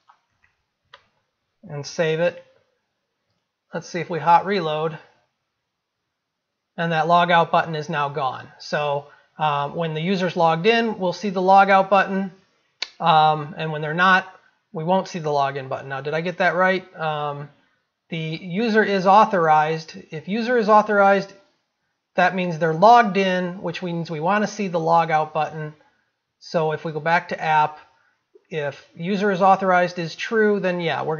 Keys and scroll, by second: 2.3 ctrl+s.